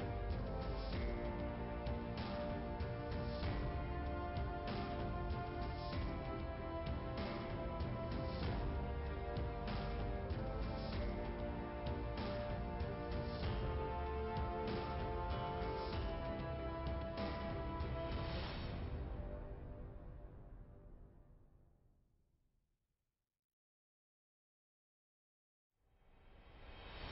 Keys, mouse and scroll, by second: 4.2 click, 6.9-7.7 scroll up 2, 8.0 click, 8.5 click, 8.8 Return, 12.2 shift+Return, 13.3 click, 13.8 right click, 14.9 click, 15.7 click, 16.7 click, 17.8 click, 20.9 click, 22.8 click, 25.7 click.